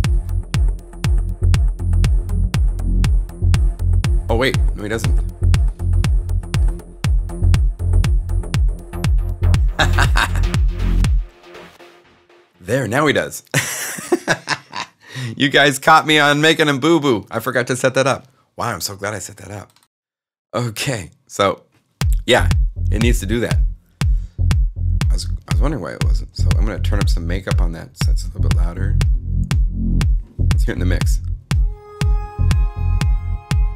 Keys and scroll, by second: 13.9 0, 30.5 s.